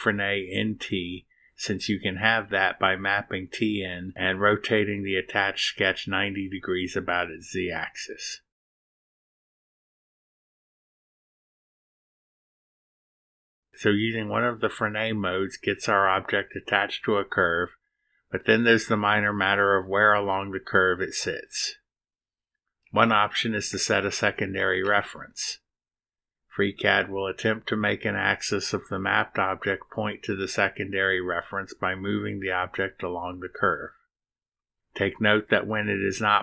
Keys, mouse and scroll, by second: 1.8-4.3 drag, 7.9 click, 12.9 click, 15.9 0, 18.0 click, 19.0-21.0 drag, 24.1 click, 32.8 click, 36.0 click.